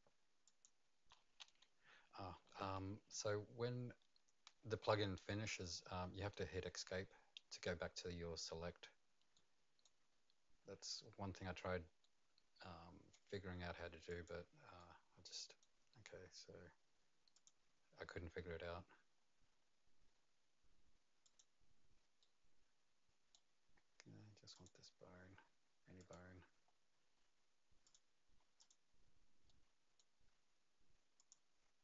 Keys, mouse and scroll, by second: 0.4 right click, 0.4 click, 0.4-1.4 scroll down 2, 1.4 Escape, 9.3 right click, 12.0 right click, 14.1 click, 14.8 right click, 17.3 click, 17.8-18.6 scroll down 2, 18.6-20.1 scroll up 6, 20.1-21.2 scroll down 1, 21.2 click, 22.2 right click, 24.5 click, 26.0 click, 26.5-27.8 scroll up 2, 27.8 click, 27.8-28.6 scroll up 1, 28.6 click, 29.5 right click, 31.2 click.